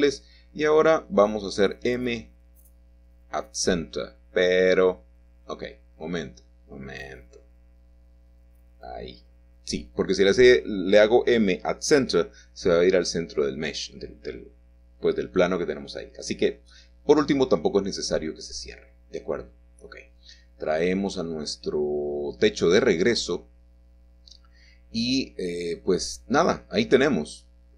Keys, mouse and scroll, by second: 0.7 typing, 1.2 click, 2.5 typing, 4.2 click, 8.3 e, 10.8 click, 11.4-12.2 scroll down 2, 11.6 middle click, 12.2-15.3 middle drag, 14.5-15.3 scroll up 2, 21.7 right click, 23.6 click, 24.4 click, 24.8 click, 25.6 scroll down 1, 25.6-26.4 scroll up 1, 26.4 shift+middle click, 26.9-27.2 scroll up 1, 27.5-27.7 scroll up 2.